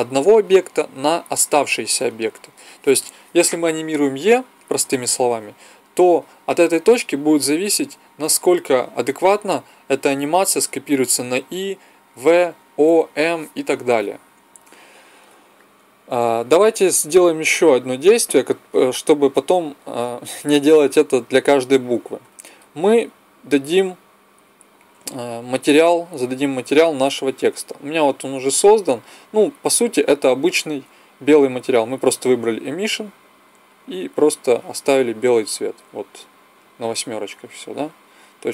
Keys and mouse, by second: 15.4-17.7 middle drag, 17.7-19.6 drag, 19.6-22.1 middle drag, 22.1-23.9 drag, 29.7-35.5 drag.